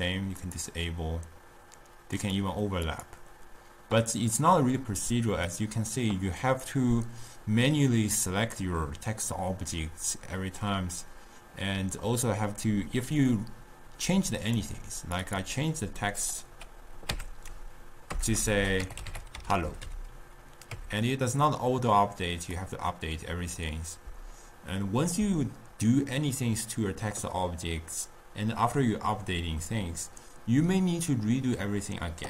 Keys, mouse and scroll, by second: 0.5 click, 2.9 click, 14.6 click, 15.2 click, 15.4-16.6 drag, 17.4 Tab, 18.2-19.9 typing, 20.8 Tab, 22.5-25.6 drag.